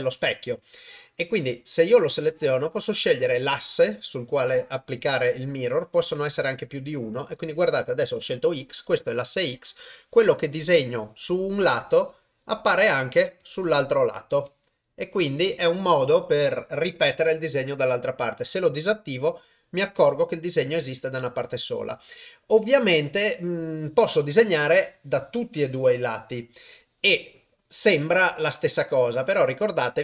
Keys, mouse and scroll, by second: 10.0 click, 11.7 click, 13.4 click, 14.5 click, 18.5 click, 24.7-25.9 drag.